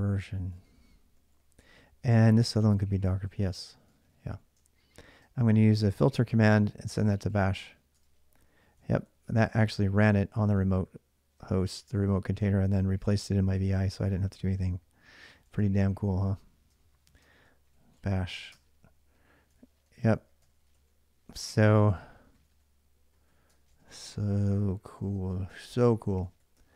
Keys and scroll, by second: 0.0-4.7 typing, 6.6-10.0 typing, 7.7 Return, 11.2-14.7 typing, 15.3 ctrl+[, 16.2-26.7 typing, 19.3 ctrl+[, 24.7 ctrl+[.